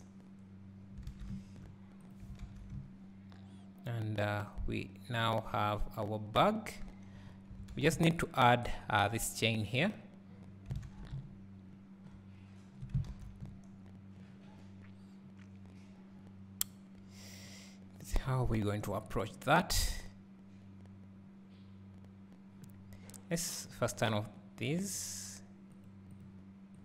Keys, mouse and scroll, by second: 0.5 click, 7.2 scroll up 1, 25.1 click, 26.7 click.